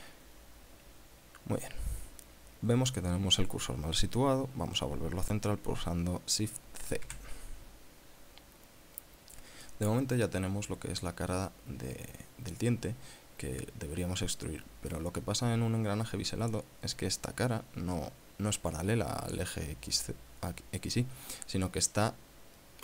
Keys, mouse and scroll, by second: 7.4 shift+c, 8.4 scroll up 2, 9.0 scroll down 2, 10.1 click.